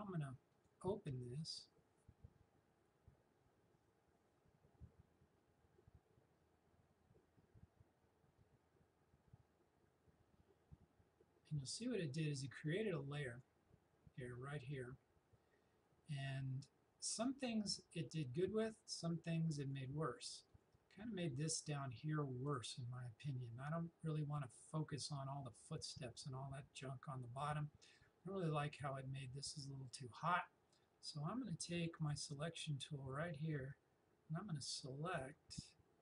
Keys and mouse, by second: 0.6 click, 12.7-16.0 drag, 18.9 click, 32.0-36.0 drag.